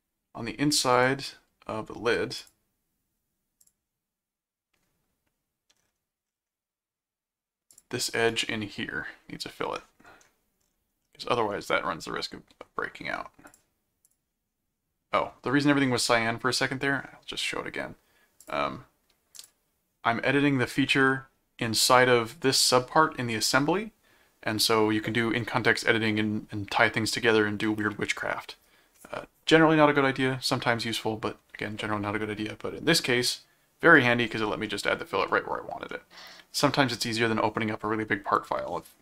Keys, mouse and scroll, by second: 0.9 click, 2.4 click, 3.2 scroll up 2, 3.6 click, 7.7 click, 8.3 right click, 11.0 middle click, 13.5 click, 14.2 click, 18.4 click, 19.3 click, 34.6 middle click, 35.3 middle click, 36.0 middle click, 38.4 click.